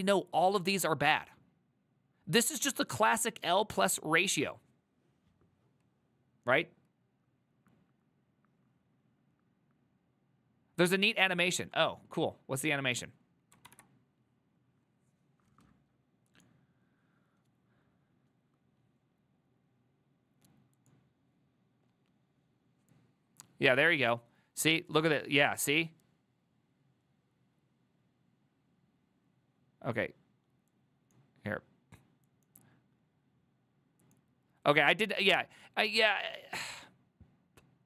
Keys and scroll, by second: 13.8 alt+f.